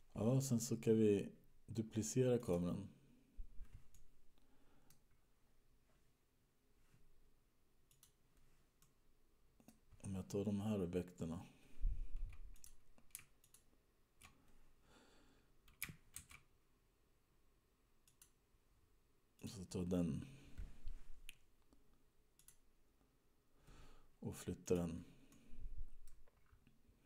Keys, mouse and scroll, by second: 3.0 click, 4.5 middle click, 5.4-7.7 scroll down 12, 8.2 click, 9.1 middle click, 10.2-11.3 scroll down 11, 13.0 click, 13.7 shift+click, 16.9 shift+d, 19.6 click, 25.2 click, 25.6 middle click, 26.7-27.0 scroll down 10.